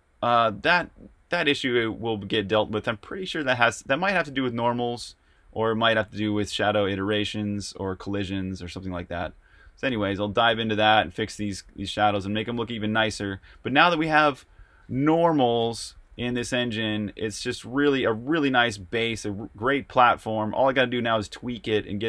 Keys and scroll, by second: 0.0-5.4 typing, 6.9-22.0 typing.